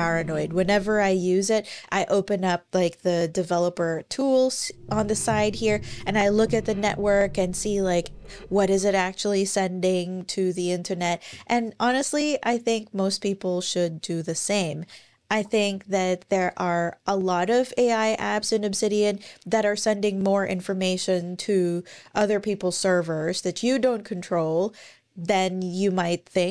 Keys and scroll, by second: 3.6 alt+super+i, 10.7 ctrl+super+r, 15.1 alt+super+i.